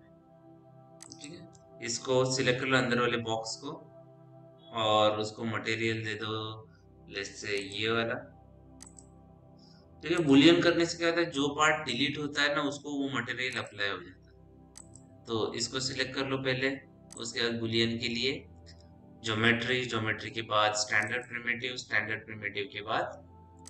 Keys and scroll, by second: 5.0 m.